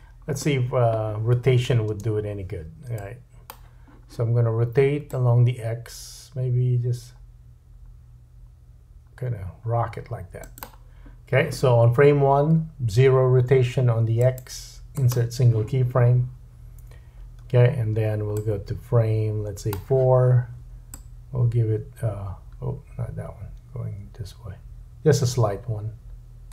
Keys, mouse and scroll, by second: 1.9 space, 3.4-10.6 drag, 10.6 right click, 10.6-14.2 middle drag, 14.2-18.4 right drag, 18.4-19.7 drag, 20.9 click.